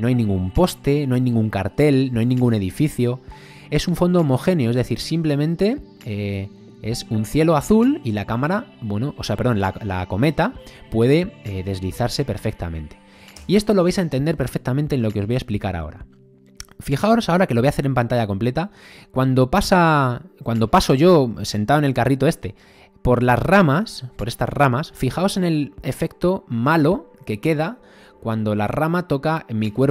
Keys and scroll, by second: 10.3 space, 13.4 space.